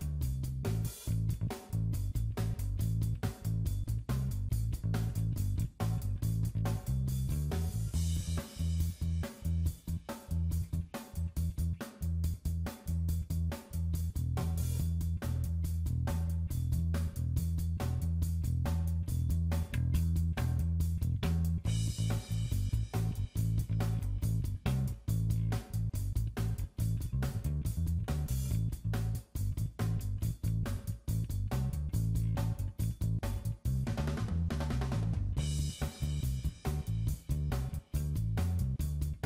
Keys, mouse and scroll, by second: 1.1 click, 2.2 middle click, 3.1-3.9 scroll up 4, 3.9 middle click, 4.7 scroll down 1, 10.2 click, 18.1 shift+click, 25.6 scroll down 1, 26.2 click, 26.2 scroll down 1, 27.0 middle click, 29.0-29.5 scroll down 6, 29.5 shift+middle click, 31.9 shift+middle click, 31.9 scroll down 7, 32.3 click, 33.2 click, 34.6 middle click, 34.7 shift+middle click, 34.9 click, 35.2 middle click, 35.3 scroll up 1, 35.6 click, 36.0 middle click, 36.3 click, 36.6 click, 37.0 s, 37.4 middle click, 37.7 KP_Decimal, 37.8 middle click, 38.3-38.7 scroll down 5, 38.5 middle click, 39.0 click.